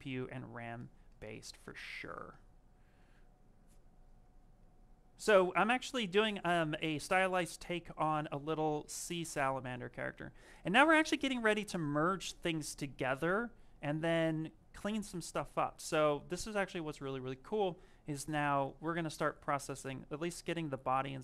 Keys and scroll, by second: 20.9 s.